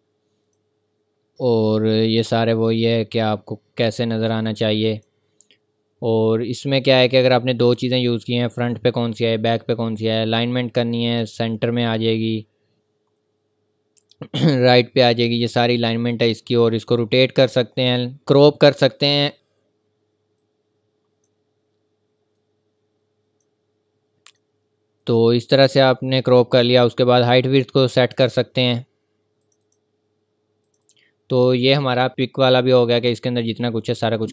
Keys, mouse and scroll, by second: 2.5 click, 4.9 click, 10.0 click, 12.0 scroll up 1, 14.0 click, 20.4 click.